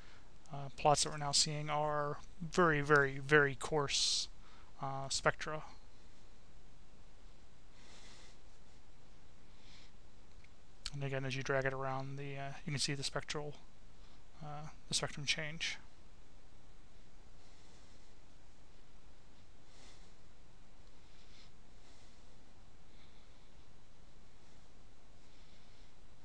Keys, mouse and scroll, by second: 0.8 right click, 2.0 click, 2.8 click, 4.8-7.1 drag, 7.7 click, 8.9 click, 9.8-11.0 drag, 11.8-19.2 drag, 20.6 click, 22.6-24.3 drag, 24.7 click.